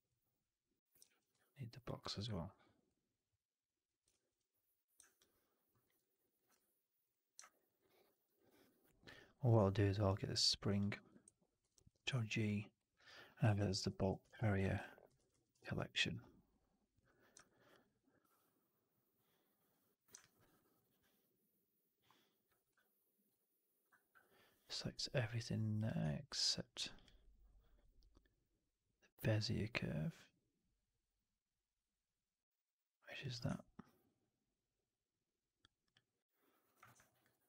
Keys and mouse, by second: 2.2 alt+click, 4.1 ctrl+z, 5.1-5.6 alt+drag, 5.7 alt+middle drag, 5.9 alt+right drag, 6.1 alt+right drag, 7.0-7.3 shift+drag, 7.4 alt+right drag, 7.6 alt+right drag, 7.7 alt+drag, 8.0 alt+middle drag, 8.2 alt+right drag, 8.6 alt+drag, 8.9 alt+middle drag, 9.0 alt+right drag, 10.3 alt+right click, 10.6 alt+drag, 10.8 alt+middle drag, 11.5 ctrl+g, 17.3 alt+right drag, 17.4 alt+drag, 20.1 alt+drag, 20.3 alt+right drag, 20.7 alt+click, 23.1 ctrl+click, 37.0 alt+click.